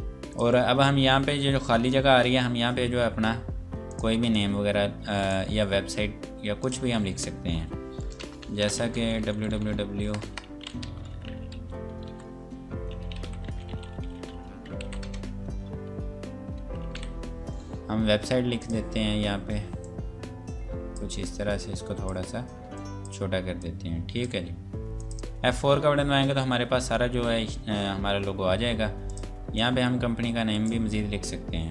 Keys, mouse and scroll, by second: 0.3 click, 3.9 click, 5.2 right click, 6.6 click, 7.6 F8, 8.4-15.3 typing, 16.9 m, 18.6 click, 25.6 F4, 29.0 click, 30.5 right click.